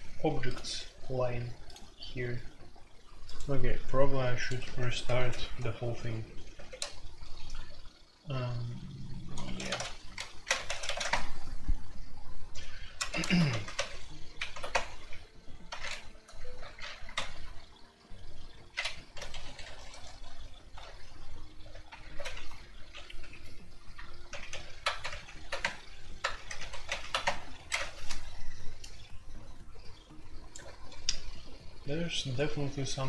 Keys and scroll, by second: 4.6 q, 6.5 typing, 9.2-11.0 typing, 13.0 Return, 13.0-14.2 typing, 13.1 ctrl+c, 13.2 alt+o, 13.5 alt+p, 14.3 alt+p, 14.7 Return, 17.1 super+j, 17.1 l, 18.9-19.9 typing, 22.0 super+k, 23.2 0, 24.3 alt+p, 24.5 alt+p, 24.8-26.1 typing, 26.3 alt+p, 26.5 alt+p, 27.2 Return.